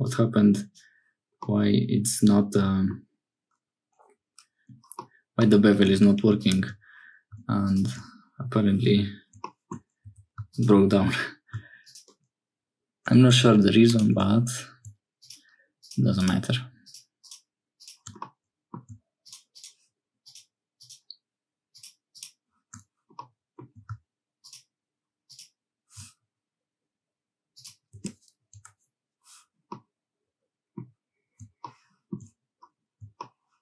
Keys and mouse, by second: 0.1 click, 1.4-3.0 drag, 5.0 click, 5.8 2, 18.2 middle click, 23.2 middle click, 28.0-29.1 middle drag, 29.7-30.8 middle drag.